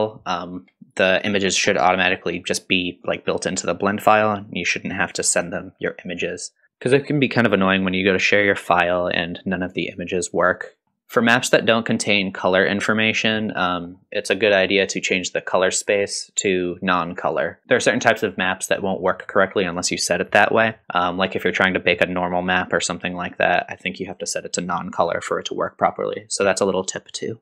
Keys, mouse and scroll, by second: 10.8 middle click, 10.8-12.7 scroll down 4, 13.3-13.9 middle drag, 15.9-17.4 drag, 17.9 middle click, 21.2-22.8 scroll down 1.